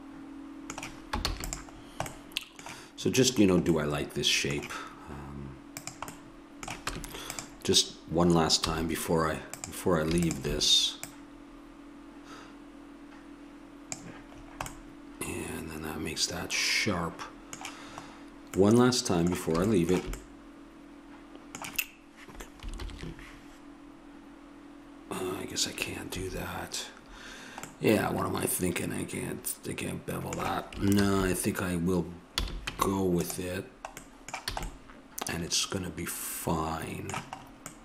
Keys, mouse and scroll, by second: 1.2 ctrl+s, 5.9-7.7 drag, 6.9 Tab, 8.6 a, 9.5-12.7 drag, 14.8 middle click, 16.6 middle click, 18.6 middle click, 26.2 Escape, 31.0 ctrl+z, 32.4 a, 32.7 Tab, 34.6 a.